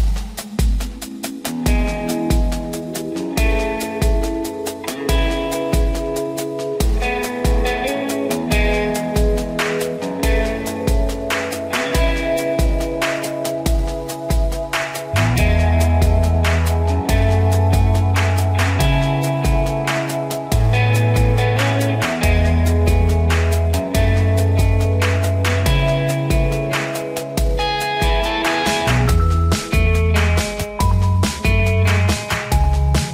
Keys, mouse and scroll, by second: 1.3-8.7 drag, 10.9 click, 11.6 ctrl+alt+z, 12.0-16.2 shift+drag, 18.7 ctrl+=, 23.2 ctrl+-, 25.9 ctrl+click, 26.1 ctrl+-, 30.0 click.